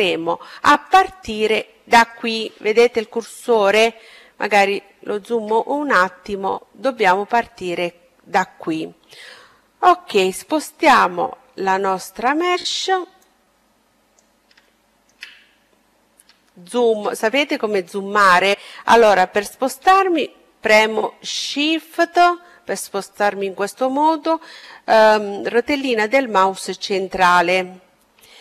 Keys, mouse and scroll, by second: 3.0-7.0 middle drag, 9.7-11.6 drag, 12.1-13.8 drag, 13.6-17.0 middle drag, 19.7-21.6 middle drag.